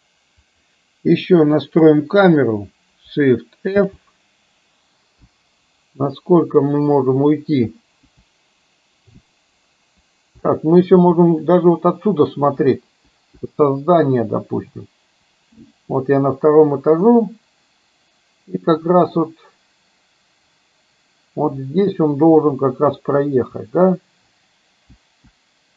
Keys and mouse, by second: 1.9 click, 3.9 shift+f.